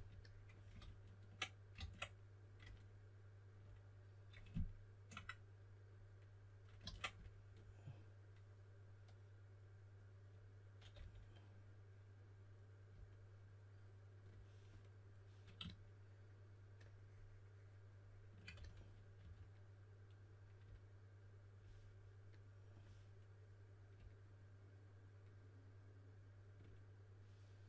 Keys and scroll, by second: 0.7 super+z, 1.7 super+z, 6.8 super+z, 10.9 s, 18.5-19.6 typing.